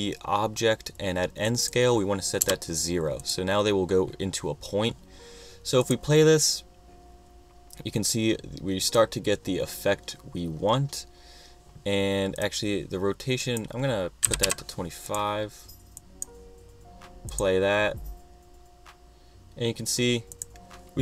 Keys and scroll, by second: 2.5 0, 14.1-15.0 typing.